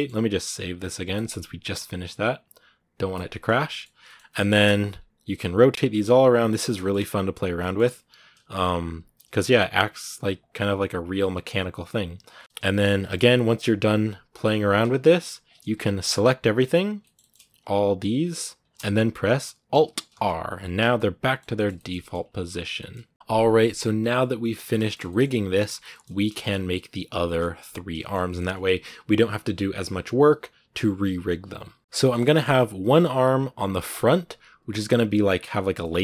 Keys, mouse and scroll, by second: 3.3 scroll down 1, 3.5 middle click, 3.9 scroll up 1, 4.1 shift+middle click, 4.4-5.2 scroll down 2, 5.2 right click, 5.7 r, 6.3 right click, 6.4 scroll down 1, 6.5 shift+middle click, 6.8 r, 7.4 shift+middle click, 7.9 right click, 8.1 r, 8.8 right click, 9.0 r, 9.6 right click, 9.7 r, 10.8 right click, 11.0 r, 12.2 right click, 12.3-13.8 shift+middle drag, 13.8 t, 16.8 shift+middle click, 17.8 b, 17.9-18.4 scroll up 2, 18.4-19.9 shift+right drag, 19.9 alt+r, 20.3-20.7 scroll down 4, 20.6 a, 20.7-22.0 middle drag, 22.0-22.6 scroll up 2, 22.6-23.8 shift+middle drag, 23.8 n, 24.6-31.8 shift+middle drag, 31.8 scroll up 4, 31.8-33.8 shift+middle drag, 33.8 click, 34.4 scroll down 2, 34.5-36.0 middle drag.